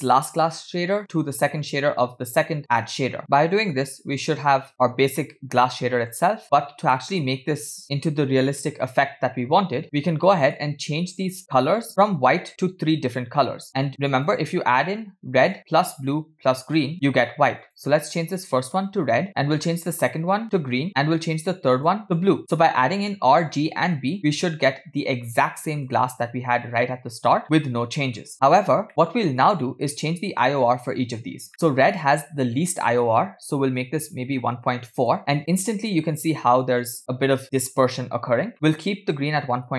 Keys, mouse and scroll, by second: 0.5-3.1 drag, 3.3-6.2 middle drag, 6.4 middle click, 7.1 middle click, 9.8 scroll down 5, 10.2 middle click, 11.1 click, 11.9 click, 11.9 middle click, 14.2 click, 15.5 click, 16.1 click, 16.7 click, 17.6 click, 20.0 click, 21.8 click, 24.4-25.4 middle drag, 25.8 click, 26.7-28.2 middle drag, 28.9 middle click, 28.9-30.7 scroll up 6, 29.7 middle click, 30.7-31.5 scroll up 1, 31.5 middle click, 31.9-35.2 drag, 37.0 middle click, 38.5 middle click.